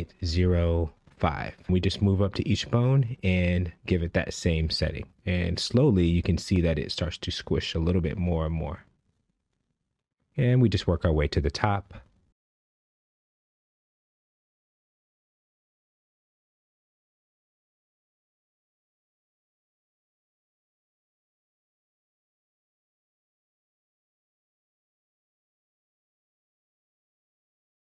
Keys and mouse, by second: 1.5 g, 2.0 z, 2.8 KP_Subtract, 3.2 KP_Decimal, 3.4 KP_0, 3.7 KP_5, 4.1 KP_Enter, 5.8 click, 7.0-9.2 typing, 8.2 KP_Subtract, 9.7 KP_Enter, 11.7 click, 12.7-15.1 typing, 13.9 KP_Subtract, 16.0 KP_Enter, 17.4 click, 18.5-20.8 typing, 19.7 KP_Subtract, 21.7 KP_Enter, 26.8 a.